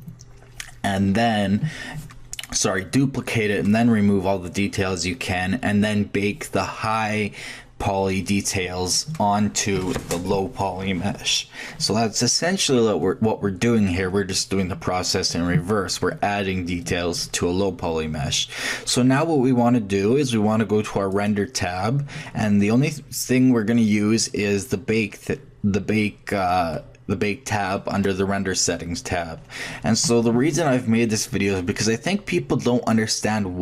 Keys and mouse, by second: 21.1-23.0 drag.